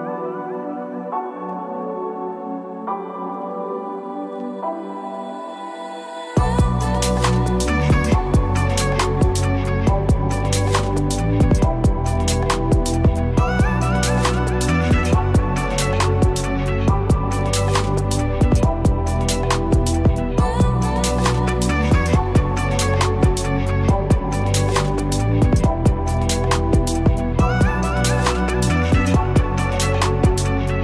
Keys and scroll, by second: 4.1 ctrl+Return, 7.6 ctrl+=.